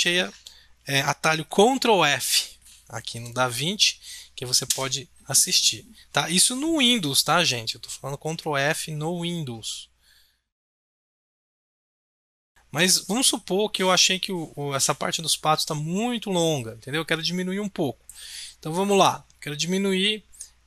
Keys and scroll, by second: 1.9 ctrl+f, 12.5 ctrl+f.